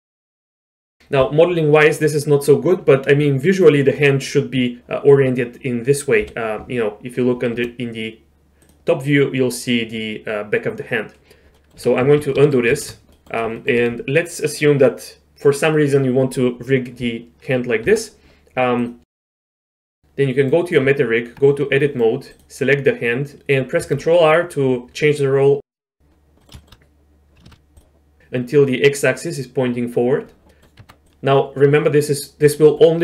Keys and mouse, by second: 0.5 Tab, 3.3 middle click, 6.2 KP_7, 7.6 g, 11.5 middle click, 12.1 ctrl+z, 12.2 ctrl+z, 12.4 ctrl+z, 12.8 ctrl+z, 13.2 click, 13.6 shift+click, 17.8 Tab, 18.8 click, 19.1 click, 20.0 middle click, 20.8 Tab, 21.7 middle click, 22.3 click, 23.4 ctrl+r, 23.8 ctrl+r, 26.5 middle click, 26.6 shift+middle click, 27.5 ctrl+r, 30.5 middle click, 30.8 Tab.